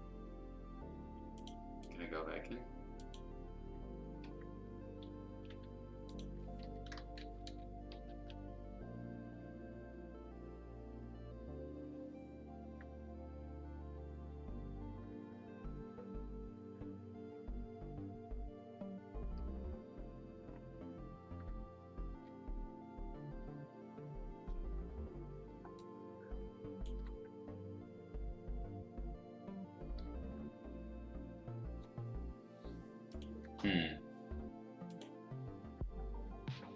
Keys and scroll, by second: 4.8 Escape, 6.6 v, 25.5 space, 34.2 F2.